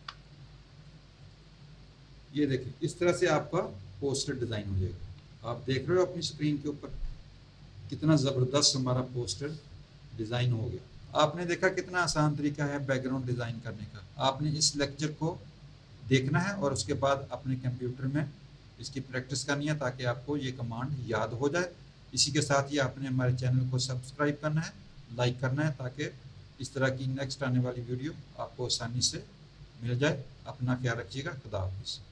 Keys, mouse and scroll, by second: 1.3 click, 5.2 z.